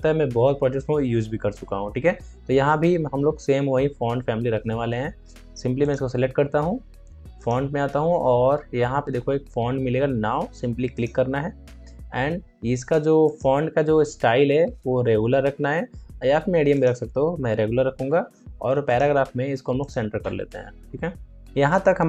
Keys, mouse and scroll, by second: 5.7 ctrl+click, 10.9 click, 15.4 click, 16.6 click, 18.9 click, 21.4 ctrl+a.